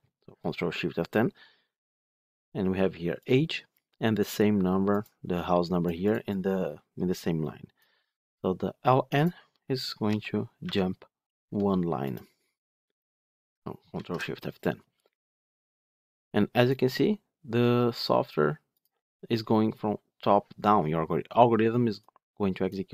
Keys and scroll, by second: 13.9 ctrl+shift+F10.